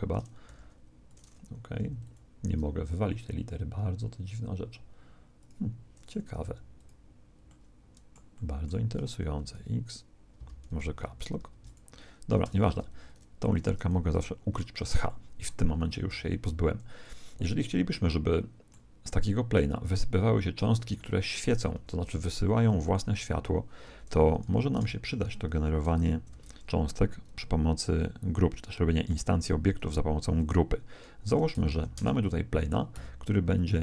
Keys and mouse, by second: 0.4 g, 1.7 x, 2.0 click, 4.2-8.5 drag, 6.3 x, 9.3 x, 9.5 middle click, 9.5 x, 11.3 ctrl+x, 11.6 click, 12.6 shift+c, 14.1 h, 15.0-17.0 middle drag, 16.1 shift+c, 17.0 right click, 19.1 middle click, 19.7 click, 20.9 middle click, 21.7-22.7 middle drag, 21.7 shift+a, 23.8 r, 26.3 alt+r, 31.2 r, 32.9 s.